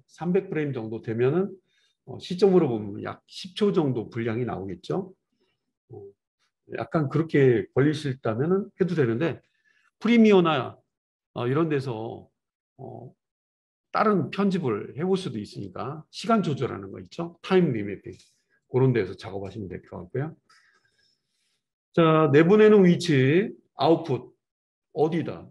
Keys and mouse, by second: 25.1 click.